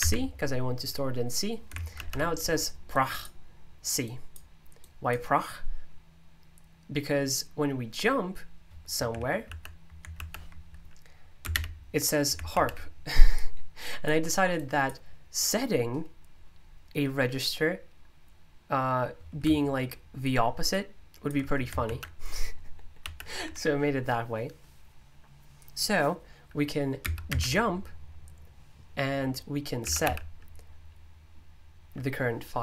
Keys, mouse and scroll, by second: 0.0 c, 2.9 click, 4.0-7.5 drag, 12.8-13.5 typing, 13.0-17.3 drag, 20.7-24.5 ctrl+drag, 27.0 typing, 29.5-30.5 typing.